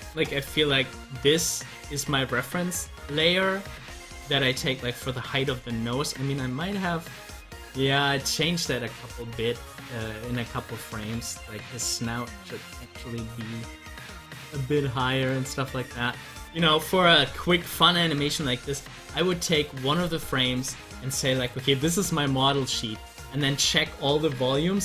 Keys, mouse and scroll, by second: 0.8 scroll down 1, 6.0 click, 8.8 scroll up 1, 16.4 scroll down 1.